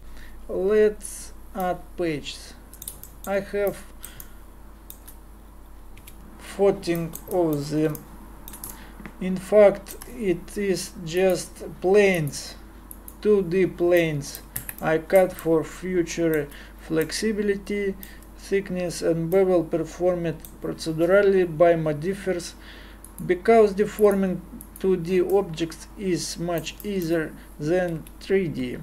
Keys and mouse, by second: 4.0 middle click, 6.0 KP_Divide, 9.5-11.2 middle drag, 14.0 middle click, 14.6 Tab, 25.4-26.4 middle drag, 28.0 KP_Divide.